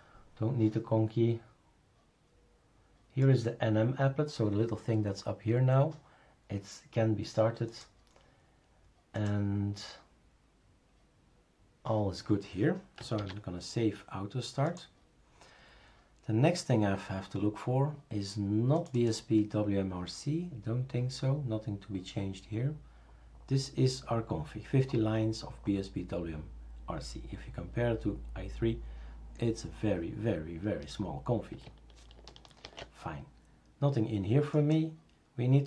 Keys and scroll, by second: 13.2 ctrl+s, 32.6 shift+super+a.